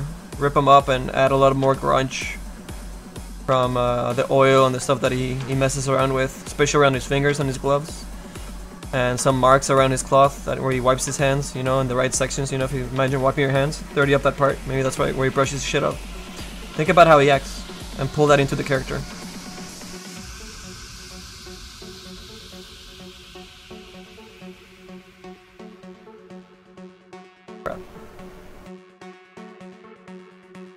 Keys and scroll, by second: 27.1 ctrl+z.